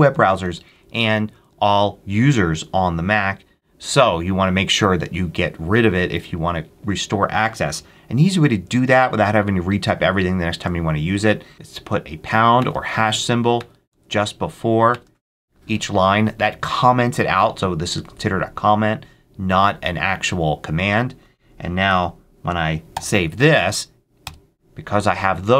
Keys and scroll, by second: 3.7 Down, 12.5 shift+3, 12.8 shift+Up, 13.0 Left, 13.5 shift+3, 13.8 shift+Up, 14.0 Left, 14.8 shift+3, 21.8 ctrl+x, 22.9 y, 24.1 Return.